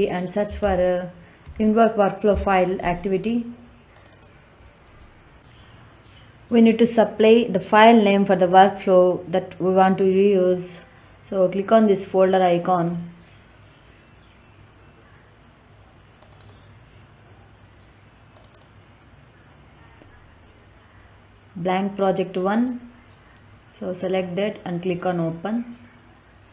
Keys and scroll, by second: 0.4 i, 0.5 n, 1.4 v, 2.2 o.